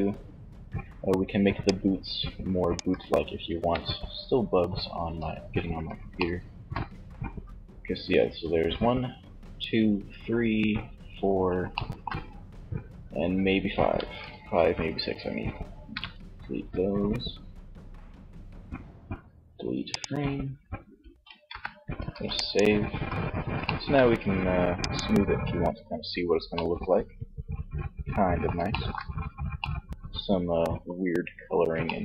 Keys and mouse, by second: 0.6 d, 0.8-2.5 drag, 2.0 d, 15.2 n, 20.5 n, 21.2 ctrl+s, 22.1 z, 22.8-24.0 middle drag, 24.0 click, 31.7 Tab.